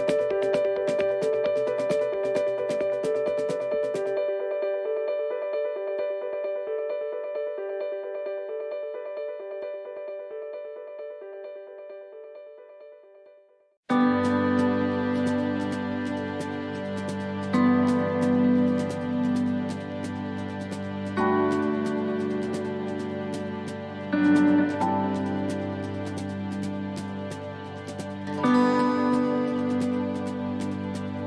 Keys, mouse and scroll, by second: 1.3 click, 5.7 click, 6.8 middle click, 8.2 click, 9.6 click, 10.9 middle click, 11.9 click, 13.1 middle click, 13.8 shift+d, 15.1 click, 18.7 right click, 19.5 l, 20.3 shift+d, 21.5 click, 27.2 right click, 27.2 l, 28.0 shift+d, 29.3 click.